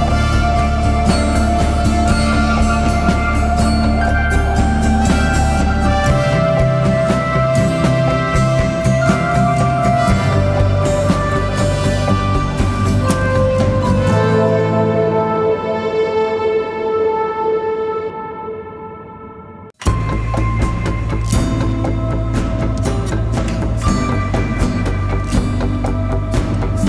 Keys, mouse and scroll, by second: 0.0 right click, 1.7 double click, 4.0-4.4 typing, 4.6 double click, 11.9 right click, 13.3 double click, 20.8 alt+click, 23.3-25.7 typing.